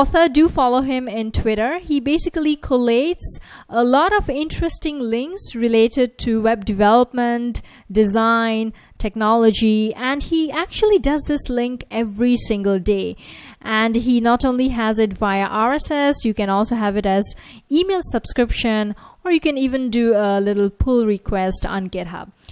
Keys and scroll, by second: 15.9 F1, 19.7 F1.